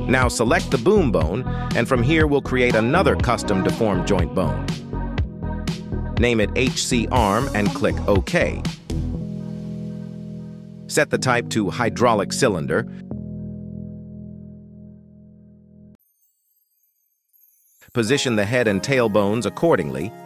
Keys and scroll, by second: 0.8 g, 1.7 Escape, 6.9 BackSpace, 7.3 a, 7.5 r, 7.7 m, 8.0 Return, 10.0 g, 13.1 Tab, 14.4 shift+s, 16.0 Tab, 17.6 shift+s, 18.3 Tab, 19.5 shift+s.